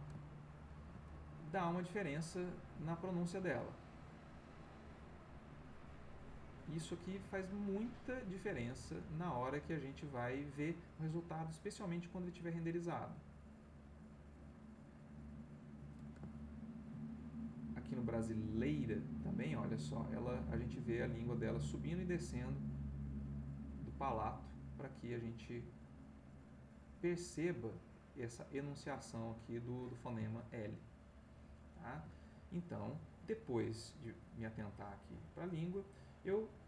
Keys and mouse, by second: 0.6 ctrl+middle click, 1.9-15.9 drag, 16.4 ctrl+middle click, 17.1 ctrl+middle click, 18.2-29.9 drag, 30.6-32.2 ctrl+middle drag, 35.4 shift+click.